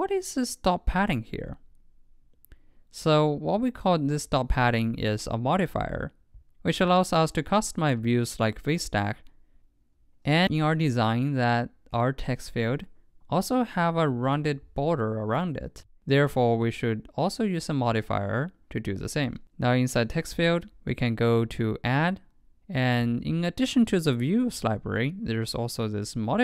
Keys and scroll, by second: 18.9 super+Right.